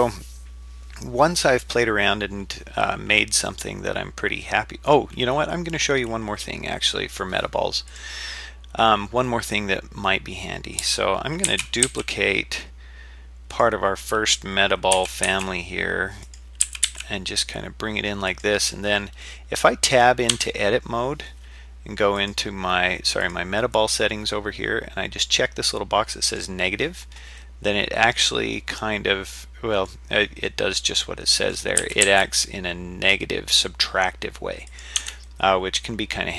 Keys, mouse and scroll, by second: 3.5-4.9 middle drag, 6.7-7.2 middle drag, 7.9 click, 9.3-10.5 middle drag, 11.5 shift+d, 14.9 g, 16.6 g, 18.7-20.0 middle drag, 20.3 Tab, 22.2 click, 23.2 click, 26.3 click, 27.4-29.9 middle drag, 30.5-31.5 middle drag, 31.8 g, 35.0 Tab, 35.3-36.3 middle drag.